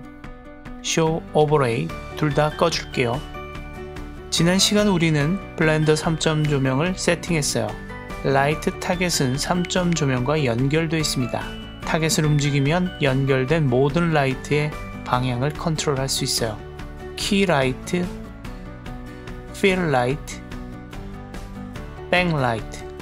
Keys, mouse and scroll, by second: 0.1 click, 2.3 click, 3.0 click, 5.1 click, 8.4 click, 11.4 right click, 12.1 click, 15.0 right click, 16.9 click, 17.4 g, 18.9 right click, 19.5 click, 20.0 g, 21.1 right click, 21.6 click, 22.3 g.